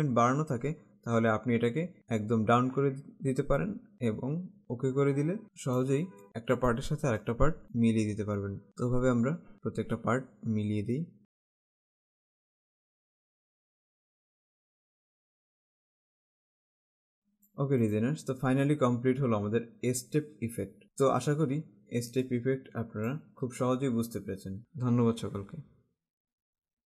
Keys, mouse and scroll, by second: 4.6 click, 5.4 space, 6.2 click, 8.8 Right, 9.5 Up, 9.9 Right, 10.5 Up, 11.4 alt+Caps_Lock, 11.4 alt+scroll down 1, 11.5 click, 11.6 space, 11.7 click, 12.3 alt+Caps_Lock, 12.3 alt+scroll up 1, 12.5 Right, 12.5 Down, 12.7 Right, 12.7 Down, 12.8 Right, 12.9 Down, 12.9 Right, 13.0 Down, 13.0 Right, 13.2 Down, 13.2 Right, 13.3 Up, 13.5 Left, 13.7 Right, 13.7 Down, 13.8 Up, 13.9 Down, 14.2 Up, 14.3 Left, 14.4 Up, 14.7 Down, 14.8 Up, 14.9 Left, 15.0 Right, 15.1 Down, 15.2 Up, 15.5 alt+Caps_Lock, 15.7 click, 15.7 space, 15.9 click, 16.8 Left, 17.0 alt+Caps_Lock, 17.0 alt+scroll down 1, 17.1 click, 17.4 space, 17.8 click, 21.5 alt+Caps_Lock, 21.5 alt+scroll up 1, 22.2 click, 22.8 space.